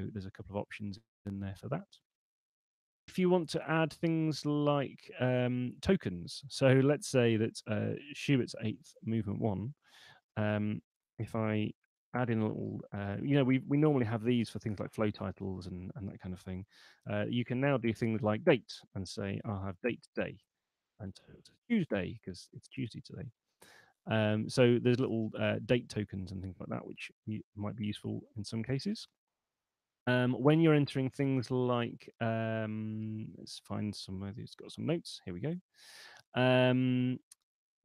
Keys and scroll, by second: 2.3 Escape, 10.2 space, 10.6 shift+1, 11.2 Left, 11.6 shift+2, 12.0 Left, 17.2-20.0 typing, 26.5 alt+shift+Left, 27.4 Delete.